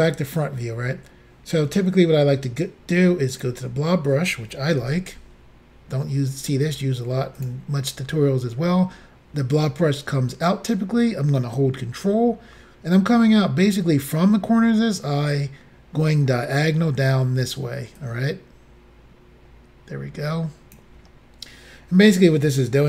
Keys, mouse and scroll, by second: 3.4 click, 4.8 f, 7.4 click, 18.0 ctrl+click.